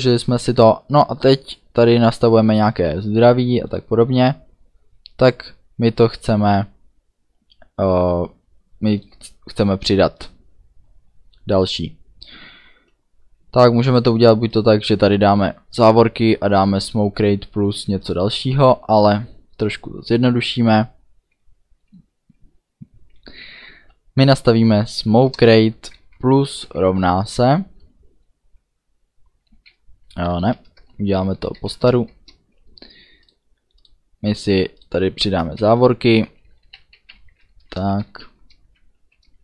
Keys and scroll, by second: 18.8 Return, 23.4 s, 23.8 m, 25.1 Down, 25.3 Return, 25.7 space, 26.1 KP_Add, 26.6 =, 26.8 space, 30.3 shift+Up, 30.7 BackSpace, 31.4 shift+Up, 31.6 shift+End, 32.0 BackSpace, 35.6 shift+[, 36.2 Delete, 36.6 Down, 37.2 Home, 38.0 shift+], 39.0 End.